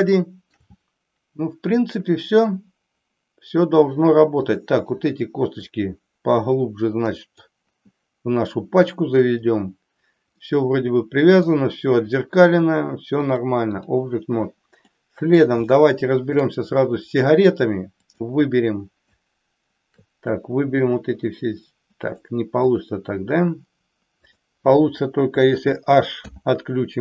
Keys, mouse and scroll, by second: 0.3 shift+middle click, 4.5 click, 5.8-7.4 drag, 10.4-11.5 middle drag, 13.2 click, 15.0 middle click, 15.8 shift+middle click, 18.0 click, 20.3-22.3 drag, 22.6 click, 26.2 h.